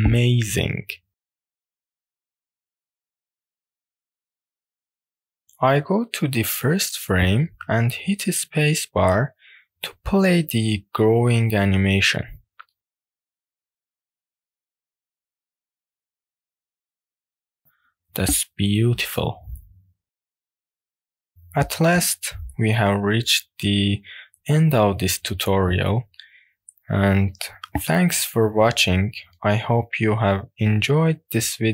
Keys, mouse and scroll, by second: 0.3-0.7 scroll down 1, 0.7 click, 1.1-2.5 middle drag, 2.7-3.1 scroll up 1, 3.2 shift+scroll up 1, 3.4 shift+middle click, 3.4 scroll down 1, 6.6-8.4 drag, 9.7 space, 20.4-23.5 middle drag, 24.6-26.4 middle drag, 26.4-26.8 scroll down 2, 27.2 scroll down 1, 27.3 middle click, 30.3 space.